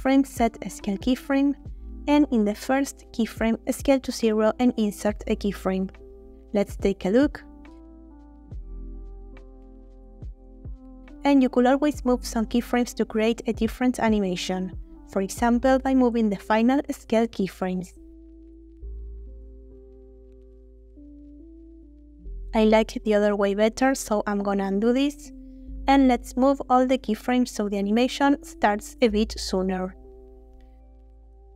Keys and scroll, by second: 0.8 |, 3.0 s, 3.3 0, 4.8 |, 9.5 space, 16.8 g, 22.9 space, 24.3 ctrl+z, 25.0 ctrl+z, 25.6 ctrl+z, 29.5 a, 30.2 g.